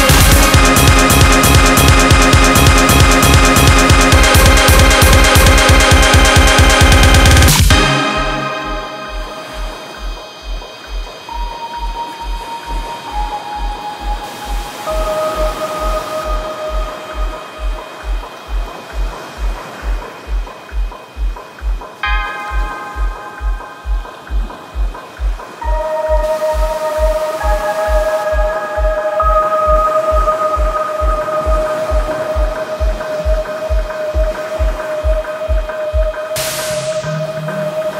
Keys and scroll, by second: 36.8 Page_Up, 36.8 Page_Down.